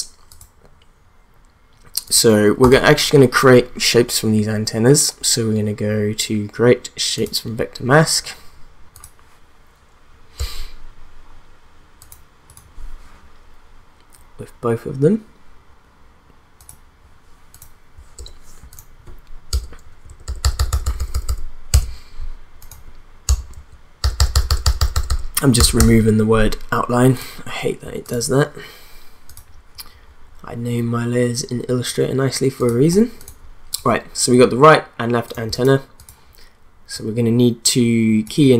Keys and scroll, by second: 10.4 BackSpace, 18.1 BackSpace, 19.5 Return, 19.8 Right, 20.1 BackSpace, 21.7 Return, 23.5 Right, 24.0 BackSpace, 25.7 Return.